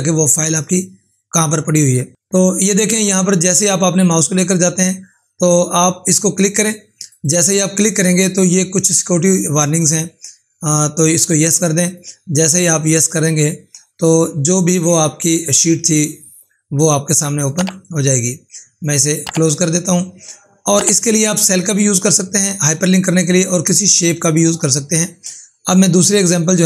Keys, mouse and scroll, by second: 7.0 click, 11.8 click, 18.7 click, 26.2 click.